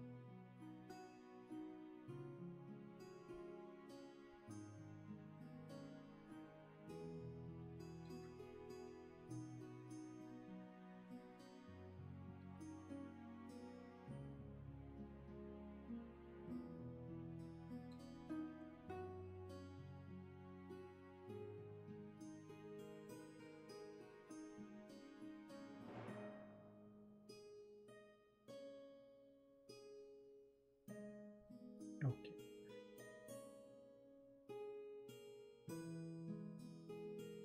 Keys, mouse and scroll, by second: 10.9 ctrl+z, 16.8 space, 19.8 space, 22.3 ctrl+z, 22.9 space, 23.8 shift+space, 25.0 ctrl+z, 25.3 space, 26.2 ctrl+shift+z, 26.8 space, 27.8 ctrl+z, 28.3 space.